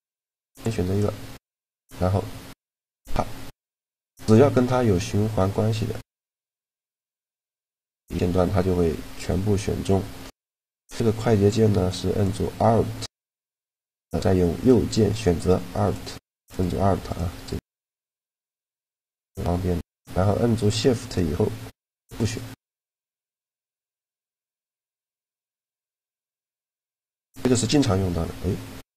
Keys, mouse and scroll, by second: 0.4 middle click, 1.4-3.1 drag, 3.1-12.6 middle drag, 12.0-20.2 right drag, 20.8-25.5 right drag, 24.4-25.9 middle drag, 25.6 a, 26.4 middle click, 26.8 super+right click, 28.6 super+a.